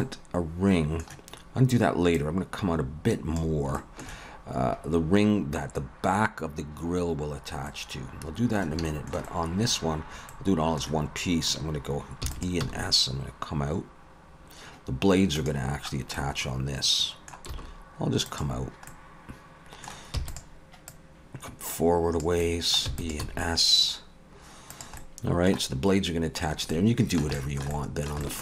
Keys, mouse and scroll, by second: 0.0 middle click, 2.2 click, 3.8 shift+middle click, 7.8 middle click, 8.9 shift+middle click, 9.2 middle click, 10.3 middle click, 10.6 shift+middle click, 12.2 e, 12.6 s, 15.9-16.9 scroll down 2, 16.1 middle click, 17.5 s, 18.9 middle click, 20.2 e, 20.9 click, 22.4 middle click, 22.9 e, 23.2 s, 25.0 middle click, 26.5-27.1 scroll up 2, 26.7 middle click, 27.3 shift+middle click, 27.7 middle click, 28.2 shift+middle click.